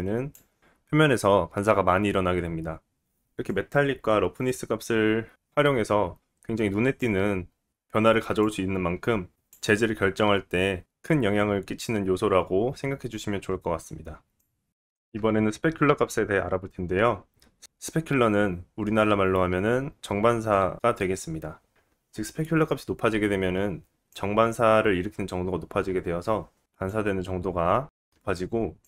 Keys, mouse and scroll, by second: 3.8-8.4 drag, 11.8-28.8 drag.